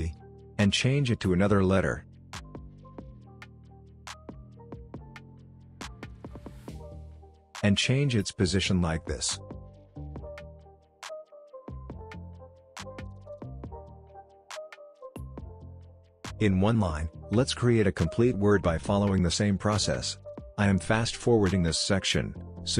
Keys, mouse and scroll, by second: 3.9 o, 5.3 click, 7.9 p, 9.1 click, 9.7-10.7 drag, 11.2 alt+scroll up 1, 11.6-15.1 drag, 15.1-17.0 drag, 17.0 ctrl+z, 17.5 click, 20.1 ctrl+d, 20.3 click, 20.5 shift+t, 20.7 click, 21.1 p, 21.2 click, 22.2 ctrl+d, 22.3 click, 22.6 shift+i.